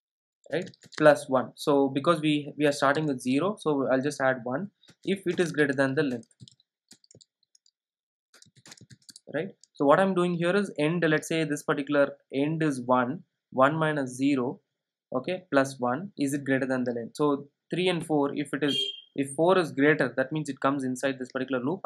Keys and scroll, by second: 7.0 Return.